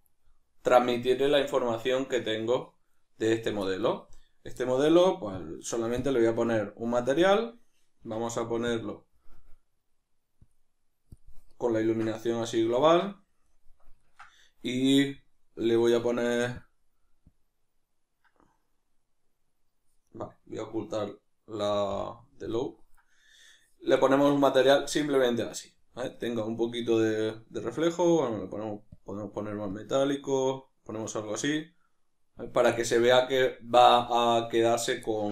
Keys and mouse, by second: 2.3 right click, 4.2 right click, 5.4-11.8 drag, 11.8-16.6 ctrl+middle drag, 16.6-20.1 drag, 20.1 right click, 22.6 right click, 24.1-27.7 middle drag, 27.7-33.5 drag, 33.5-35.3 middle drag.